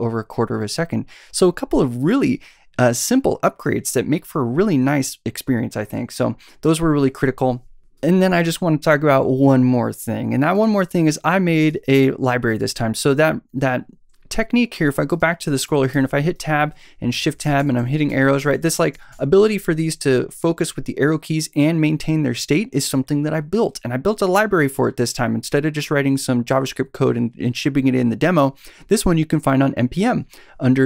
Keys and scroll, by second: 15.9 Tab, 16.8 shift+Tab, 17.4 shift+Left, 17.8 Right, 18.1 Tab, 18.4 Right, 18.7 Left.